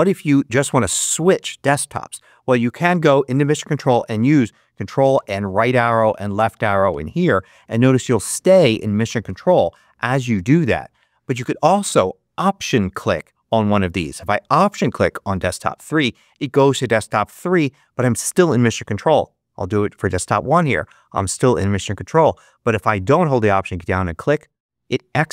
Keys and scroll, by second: 2.8 ctrl+Up, 5.1 ctrl+Right, 6.3 ctrl+Left, 10.2 ctrl+Right.